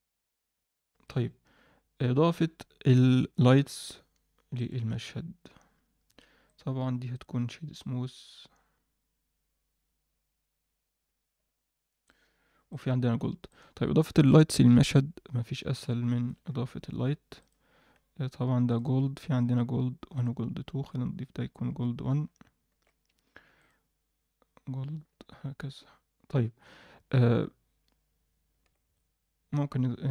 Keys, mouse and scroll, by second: 4.5 click, 6.0 click, 6.4-9.0 right drag, 9.7-14.5 scroll down 1, 14.7 click, 14.7-15.4 scroll up 1, 14.7 KP_1, 15.4-16.2 scroll down 2, 15.8-16.2 middle drag, 16.4-17.4 scroll up 1, 17.4 click, 17.4 scroll up 1, 18.7-20.3 drag, 21.6-22.0 scroll down 1, 22.0-22.5 scroll up 1, 22.7 alt+a, 22.7-23.1 scroll up 1, 23.1 scroll down 1, 23.5 click, 26.5-28.1 scroll up 1, 28.1-28.8 scroll down 2, 28.6 alt+a, 28.9-30.1 middle drag.